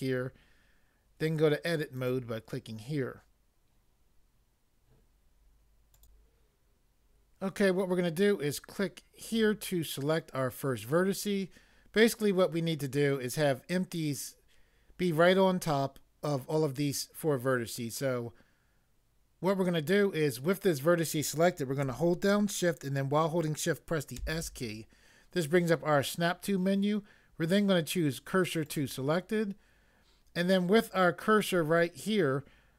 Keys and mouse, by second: 2.0 click, 6.0 click, 9.3 click, 24.1 s, 28.7 click.